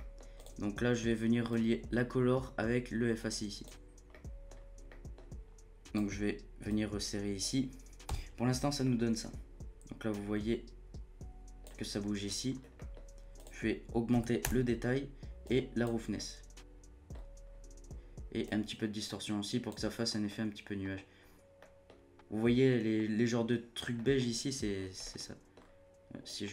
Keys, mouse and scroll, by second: 0.2 scroll up 1, 0.3 click, 1.5 click, 4.1 middle click, 4.5-4.9 scroll up 1, 4.9 middle click, 5.1-5.7 scroll up 1, 5.7-8.1 drag, 8.1 z, 8.8-10.1 middle drag, 10.1-12.5 drag, 12.5 scroll up 3, 12.7 middle click, 13.3-16.1 drag, 16.1-17.1 middle drag, 17.1-17.5 scroll up 2, 17.5-18.4 scroll down 3, 18.4-19.9 drag, 19.9-20.3 scroll up 2, 20.3-21.3 middle drag, 21.3 scroll up 1, 21.6-24.7 middle drag, 24.7 scroll down 4, 25.0 middle click, 25.5-26.3 scroll up 1, 26.3-26.5 drag.